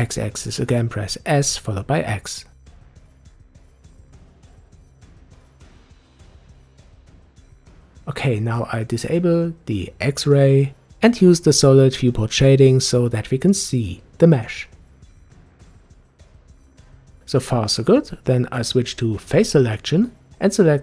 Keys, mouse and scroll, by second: 0.2 s, 6.3-6.6 scroll down 2, 6.9-9.9 middle drag, 11.4 click, 13.0-16.5 drag, 16.5-17.9 middle drag, 18.6 click, 19.5-20.6 middle drag, 20.6 click.